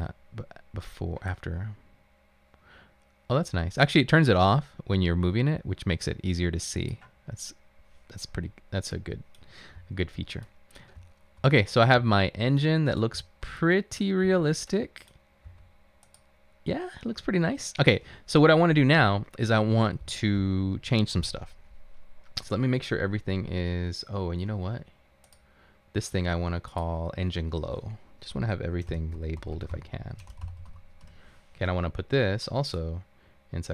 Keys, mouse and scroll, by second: 9.9 a, 11.0-12.0 typing, 13.2 typing, 14.3 typing, 15.5 typing, 28.8-31.3 typing, 33.2-33.7 typing.